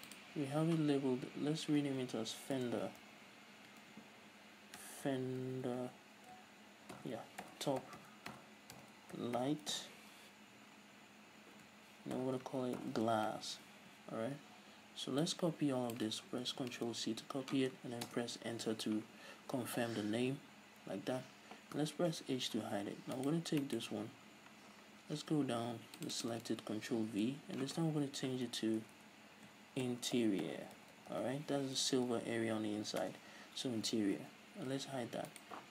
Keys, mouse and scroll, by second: 0.2 click, 2.1-21.2 drag, 5.4 BackSpace, 14.1 s, 18.5 Return, 19.8-20.5 scroll up 2, 20.5-21.2 scroll up 1, 21.2 scroll down 1, 22.4 h, 22.7 scroll up 1, 23.5-23.9 right drag, 23.9-26.3 middle drag, 25.0-26.0 scroll down 2, 26.0-26.3 scroll down 1, 26.3-35.7 drag, 28.9 BackSpace, 33.5 Return, 35.1 h.